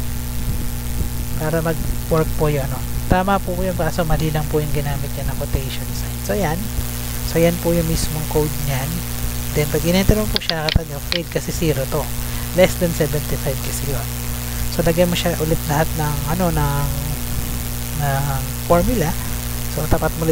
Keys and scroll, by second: 0.4 BackSpace, 0.8 Left, 2.1 BackSpace, 3.3 shift+', 4.7 shift+', 5.0 BackSpace, 9.8 Return.